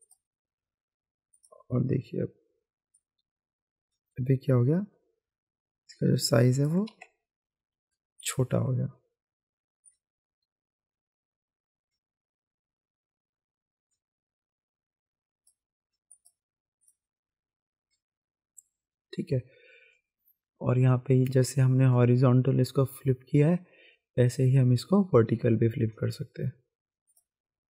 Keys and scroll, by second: 6.9 ctrl+z, 7.5 ctrl+alt+z.